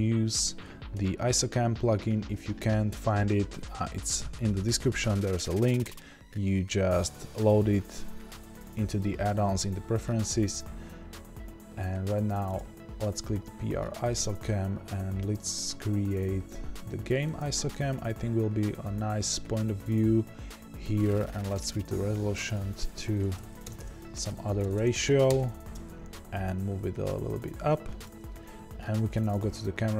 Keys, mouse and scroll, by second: 0.9 n, 17.3-26.3 drag, 24.1 KP_0, 26.3 scroll up 1, 26.6 g, 28.0 click.